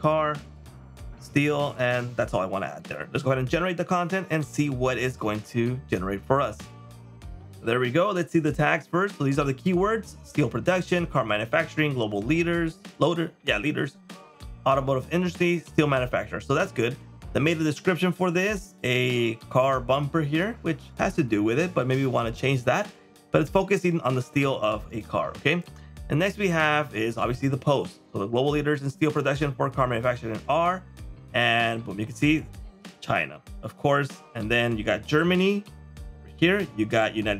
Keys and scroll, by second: 17.9 super+m, 31.5 super+m, 32.8 super+m, 36.6 super+m.